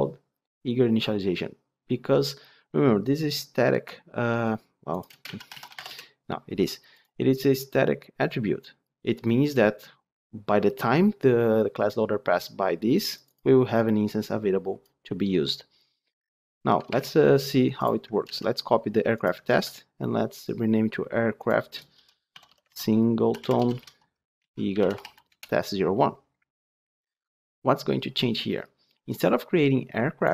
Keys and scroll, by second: 16.9 alt+1, 18.1 ctrl+c, 19.4 ctrl+v.